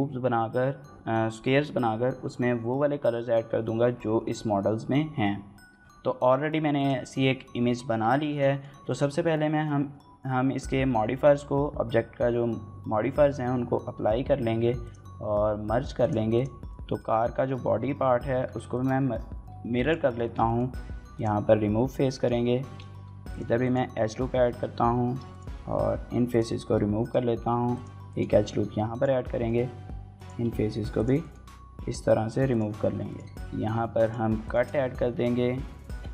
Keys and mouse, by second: 8.0 shift+middle click, 8.3 middle click, 13.5 ctrl+a, 13.6 ctrl+a, 15.8-16.5 drag, 16.5 middle drag, 16.9 middle click, 17.7 KP_Divide, 18.2 Tab, 18.5 shift+click, 18.9 3, 19.6 alt+click, 20.1 shift+click, 20.2 click, 20.6 x, 21.9 click, 22.7 ctrl+r, 23.4 click, 24.7 3, 25.1 alt+click, 25.7 x, 26.5 middle click, 27.1 ctrl+r, 27.9 right click, 28.4 3, 28.7 alt+click, 29.1 middle click, 29.5 x, 30.5 ctrl+r, 31.0 right click, 32.0 3, 32.3 alt+click, 32.6 x, 33.2 shift+click, 33.3 click, 33.7 ctrl+r, 33.9-36.1 typing, 34.1 right click, 34.3 middle click, 35.1 shift+middle click, 35.5 shift+middle click, 35.9 click.